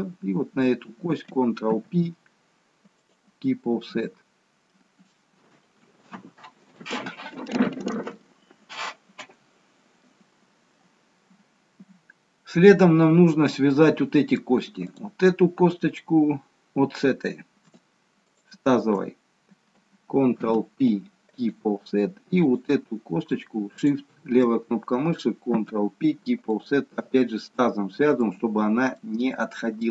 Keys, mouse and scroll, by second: 1.7 ctrl+p, 3.8 scroll down 1, 4.8-6.8 scroll up 1, 12.3-13.0 scroll up 1, 13.0 middle click, 13.0-15.0 scroll up 1, 15.0 click, 18.4 shift+click, 20.4 ctrl+p, 22.6 click, 23.9 shift+click, 26.8 ctrl+p, 27.2 scroll down 2, 27.5 middle click, 29.0 middle click.